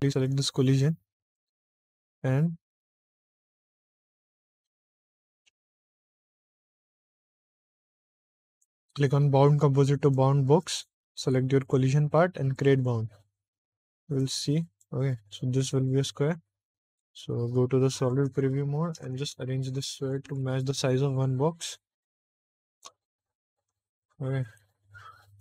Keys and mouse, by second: 0.0 click, 8.4-10.1 drag, 11.5 click, 12.4 click, 14.1 click, 14.6 click, 15.2 middle click, 16.9 z, 18.4 shift+middle click, 19.0 `, 20.2 s, 22.7 shift+click, 22.9-23.9 typing.